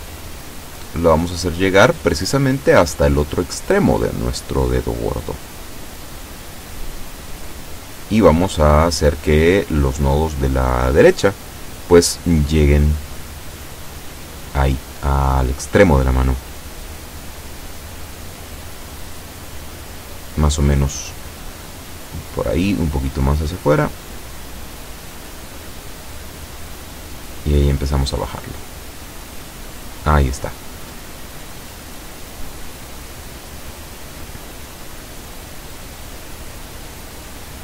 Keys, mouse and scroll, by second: 3.1-4.2 drag, 6.0 a, 6.8 b, 8.5-10.1 drag, 11.4-23.2 drag, 26.4-31.4 drag.